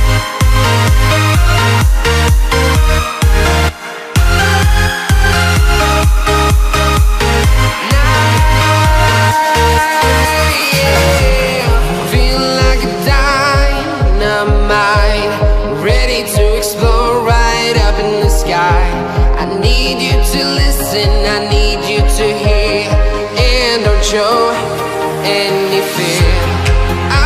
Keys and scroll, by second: 24.2 ctrl+z.